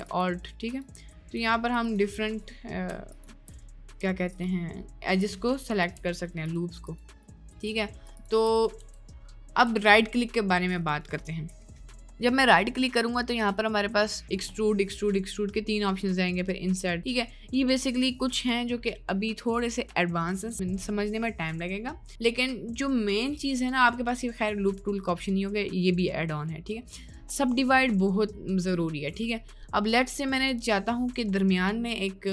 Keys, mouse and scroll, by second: 2.4 middle click, 3.7 middle click, 4.3 alt+click, 5.7 click, 6.4 alt+click, 6.9 alt+click, 8.6 click, 8.8 Tab, 9.5 middle click, 9.6 Tab, 10.0 middle click, 11.6 click, 11.6 3, 12.7-29.4 right drag, 29.7 middle click, 30.7 middle click, 30.7 click.